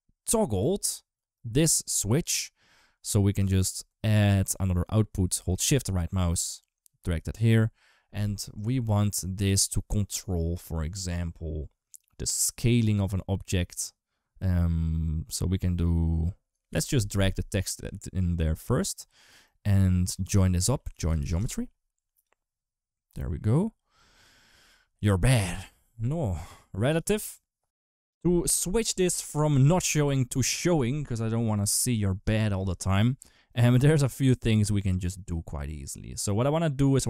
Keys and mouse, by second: 0.5 ctrl+s, 5.6 shift+right click, 6.9-16.5 drag, 17.5 click, 19.7 click, 20.3 shift+a, 22.9 click, 23.2 click, 26.7 click, 27.5 ctrl+x, 27.5 ctrl+s, 36.3 click.